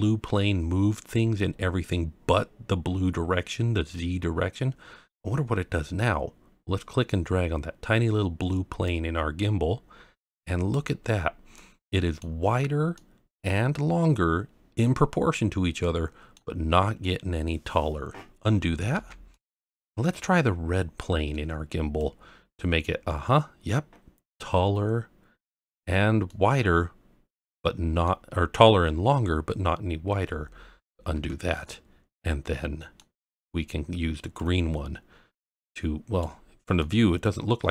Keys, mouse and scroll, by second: 8.8 click, 11.0-11.5 scroll down 1, 11.5-12.2 middle drag, 11.5 scroll down 1, 12.9-13.4 middle drag, 15.8-16.3 middle drag, 18.9 ctrl+z, 19.3-20.0 middle drag, 20.3-20.8 scroll up 1, 22.0 click, 25.7-26.3 scroll down 1, 26.3-28.0 middle drag, 31.1 ctrl+z, 31.5-33.0 middle drag, 34.3 click, 36.4-36.8 scroll down 1, 36.8-37.7 middle drag.